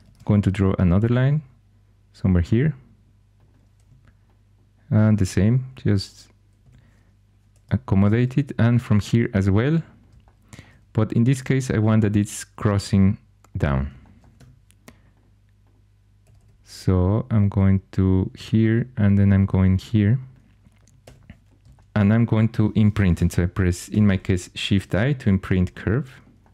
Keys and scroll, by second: 0.0 ctrl+super+c, 3.7 1, 5.0 typing, 6.6 2, 7.9 ctrl+super+c, 14.3 1, 16.2 typing, 19.2 typing, 21.0 2, 23.8 Caps_Lock.